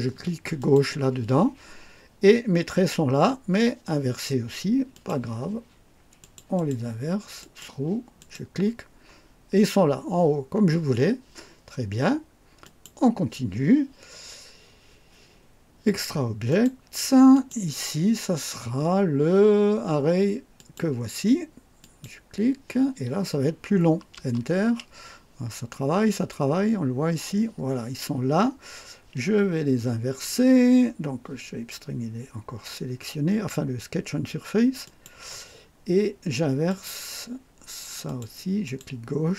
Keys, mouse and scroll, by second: 0.6 click, 4.9 click, 6.2 click, 7.4 click, 8.2 click, 12.6 click, 16.5 click, 17.3 click, 20.6 click, 21.8 click, 24.2 Return, 34.8 click, 36.7 click, 38.0 click, 38.6 click.